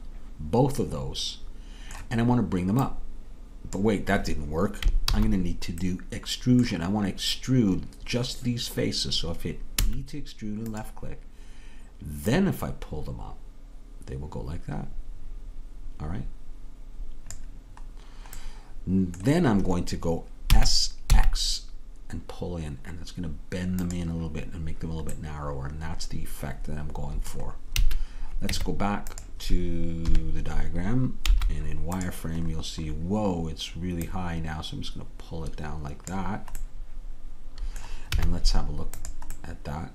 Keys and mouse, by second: 0.0 click, 0.1 middle click, 0.2 right click, 2.9-4.9 drag, 5.2 ctrl+z, 9.8 e, 12.3-17.3 drag, 18.0-20.2 middle drag, 20.5 s, 25.3-26.6 middle drag, 27.9 a, 28.6 Tab, 30.1 KP_3, 31.4 z, 34.1-36.2 drag, 36.7-38.2 middle drag, 38.2 z.